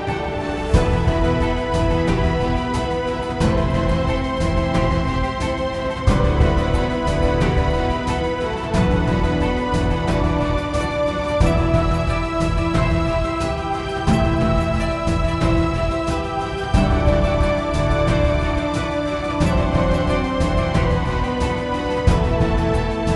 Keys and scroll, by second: 17.7-21.8 typing, 22.1 Return.